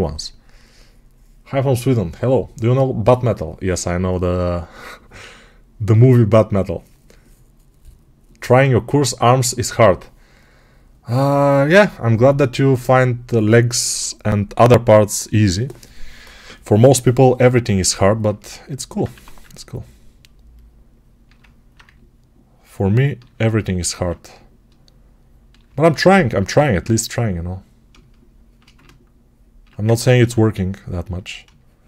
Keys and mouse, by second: 18.1-28.5 ctrl+alt+right drag, 19.0 1, 29.8 ctrl+z, 30.1 ctrl+z.